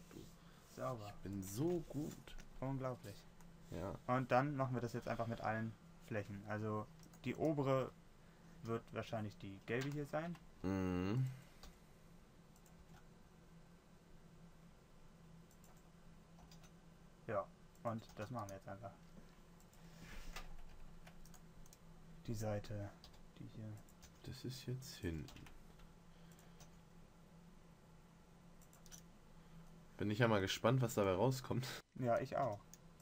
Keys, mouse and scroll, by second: 8.9 g, 12.0 s, 13.2 g, 16.8 s, 18.5 g, 23.5 s, 24.4 g, 25.7 s, 27.0 g, 32.8 s.